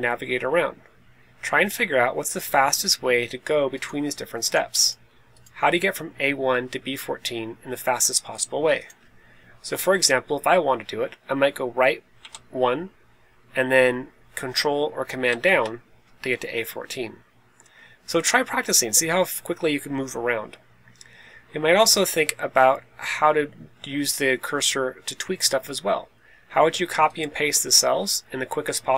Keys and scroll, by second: 12.1 Right, 15.2 super+Down.